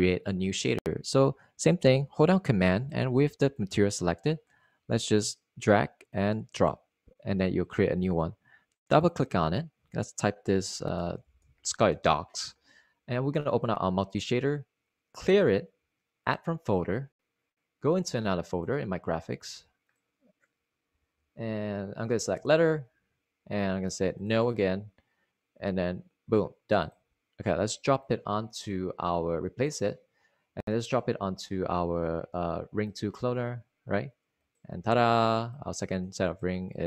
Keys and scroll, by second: 11.3-13.0 typing, 21.6 Up, 21.7-22.6 typing, 24.4 Return.